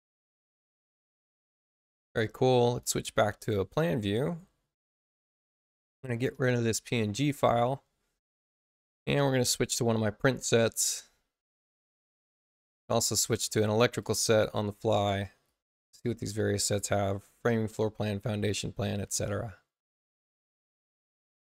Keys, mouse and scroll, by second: 1.8 click, 5.3 space, 5.8 click, 9.4 click, 10.4 click, 12.6 click, 13.9 click, 15.4 click, 17.7 click, 18.9 click, 20.4 click.